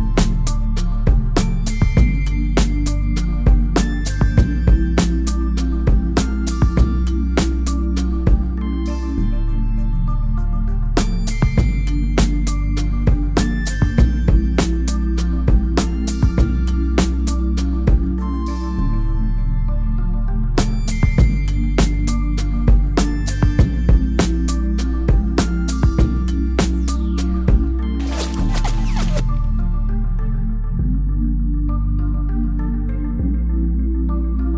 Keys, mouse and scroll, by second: 3.6 ctrl+m, 4.9 click, 7.7 Left, 9.4 Left, 14.6 Left, 14.6 click, 16.0 click, 16.4 ctrl+m, 16.9-17.4 scroll down 1, 17.4 click, 20.1 click, 30.3 click, 32.9 click.